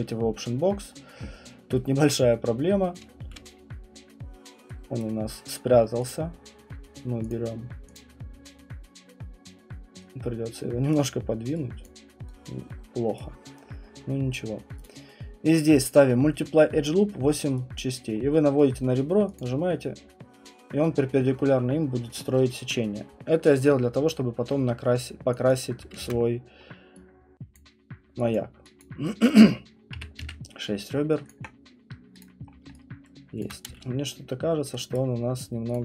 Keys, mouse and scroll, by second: 3.2 space, 5.0 right click, 6.1 click, 7.3 click, 7.9 click, 10.9 right click, 11.8 click, 12.3 right click, 13.1 right click, 14.8 click, 17.7 click, 18.1 middle click, 18.1 middle click, 18.2 middle click, 18.3 middle click, 19.3 click, 25.5 click, 26.0 ctrl+z, 27.5 click, 28.3 click, 28.8 click, 29.2 click, 29.9 6, 31.3 click, 32.2 click, 32.5 scroll, 33.4 alt+right click, 33.7 space, 34.9 right click, 35.7 alt+click.